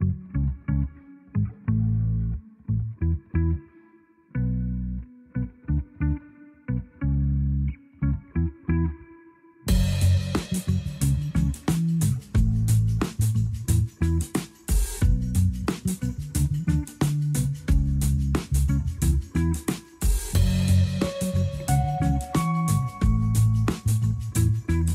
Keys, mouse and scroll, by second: 4.8 click, 6.1-8.4 drag, 22.8-24.9 drag.